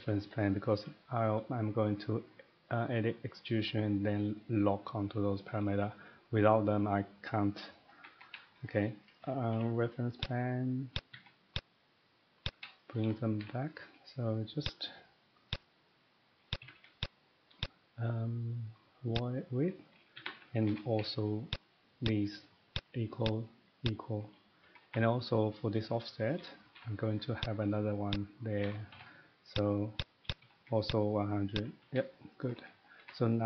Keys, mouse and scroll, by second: 0.4 middle click, 5.5 middle click, 6.8 middle click, 7.6 scroll, 7.8 middle click, 8.0 Escape, 8.1 Escape, 8.2 Escape, 8.3 scroll, 8.6 middle click, 9.1 middle click, 9.2 scroll down 2, 9.2 typing, 10.2 click, 11.0 click, 11.1 Escape, 11.5 click, 11.8-12.5 scroll down 1, 12.5 click, 12.6 Escape, 12.8-13.5 typing, 12.9 middle click, 13.8 middle click, 14.7 click, 15.5 click, 15.8 middle click, 16.5 click, 16.6 Escape, 16.7 Escape, 17.0 click, 17.6 click, 19.2 click, 20.1 middle click, 20.2 Escape, 20.3 Escape, 20.7 middle click, 20.8-21.1 typing, 21.5 click, 22.1 click, 22.8 click, 23.3 click, 23.8 click, 24.6 middle click, 24.6 Escape, 24.8 Escape, 26.3 middle click, 26.5 typing, 27.4 click, 28.1 click, 28.4-29.1 typing, 29.1-29.5 scroll, 29.5 click, 30.0 click, 30.3 click, 30.4 Escape, 30.6 Escape, 30.9 click, 31.5 click, 31.9 Escape, 32.4 middle click, 32.6 Escape, 32.6 scroll up 1, 32.6 typing, 32.8 scroll, 33.0 Escape.